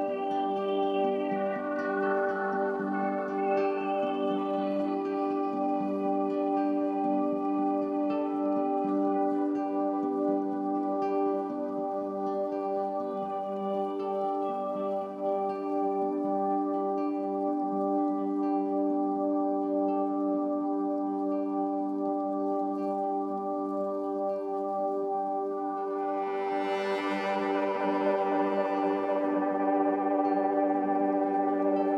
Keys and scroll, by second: 26.3 ctrl+BackSpace.